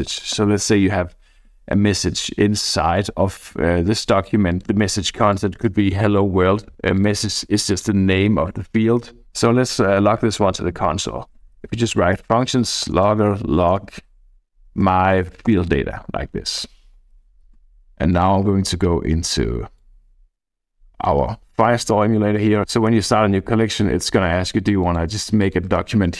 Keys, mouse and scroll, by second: 0.0-0.8 typing, 1.7-2.6 scroll down 2, 4.5 click, 4.9 click, 6.9-8.3 drag, 11.1-15.4 typing, 15.5 Return, 16.0 Right, 16.5 shift+;, 18.1 click, 19.8-21.0 drag, 22.9 Tab, 23.2 Tab, 24.8 click, 25.4 click.